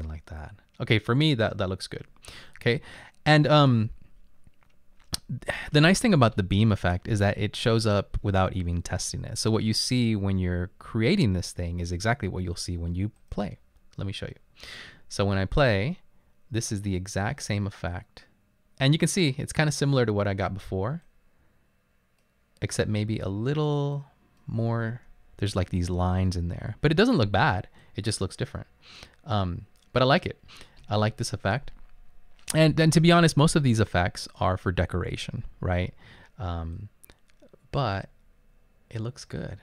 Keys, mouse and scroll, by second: 10.5 click, 25.6 Up, 26.0 Left.